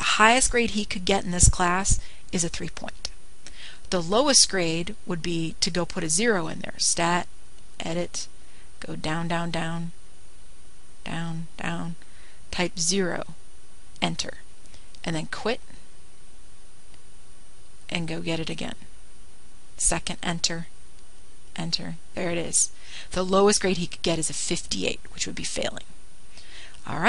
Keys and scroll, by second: 9.2 Return, 11.4 Down, 11.6 Down, 12.5 Down, 13.1 Down, 14.7 0, 15.5 Return, 21.2 Return, 23.1 Return.